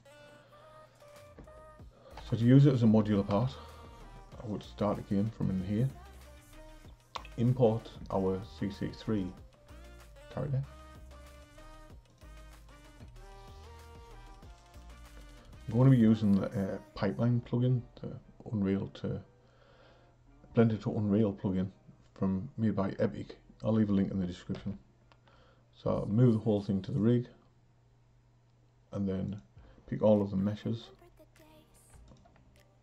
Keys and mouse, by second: 1.1 click, 2.2 a, 3.3 Delete, 4.3 click, 9.2-24.5 drag, 24.5 m, 29.2 click, 32.0 shift+click.